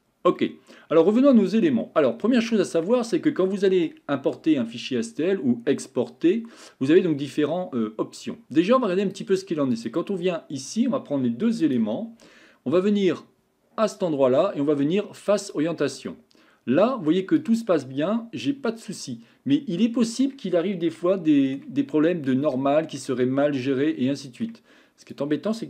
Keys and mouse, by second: 0.4-1.4 middle drag, 2.5-2.9 shift+middle drag, 3.1 middle click, 9.0 click, 9.7 click, 11.7 shift+click, 13.9-15.8 drag, 16.1-17.1 middle drag, 17.4 click, 17.8-20.2 middle drag, 21.1-21.6 shift+middle drag, 22.5-23.0 shift+middle drag, 23.9-24.5 middle drag.